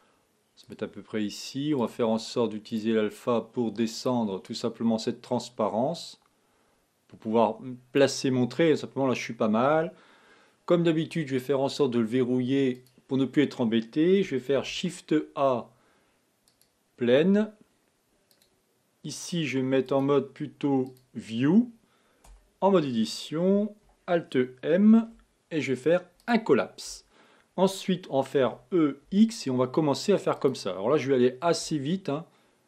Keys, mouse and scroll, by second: 1.9 click, 4.0 click, 4.6-7.6 drag, 12.9 click, 14.6 shift+a, 18.7 click, 19.9-22.3 drag, 22.3 Tab, 25.0 alt+m, 28.4 e, 31.7 e.